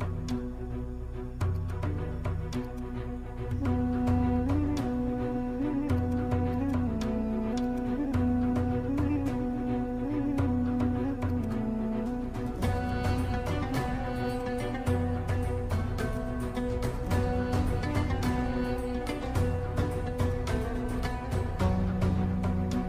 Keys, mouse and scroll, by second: 1.6 click, 6.0-11.3 drag, 11.3-14.3 drag, 16.1 click, 20.2-22.8 drag.